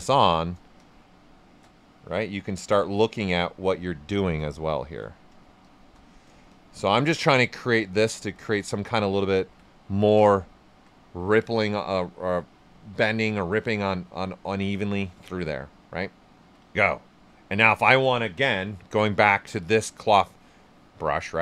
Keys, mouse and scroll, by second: 0.7 shift+click, 2.4 right click, 4.4 shift+click, 4.7 alt+right click, 5.0 right click, 5.6 shift+click, 8.7 ctrl+right click, 10.6 right click, 16.4 alt+right click, 16.7 ctrl+right click, 18.6 b.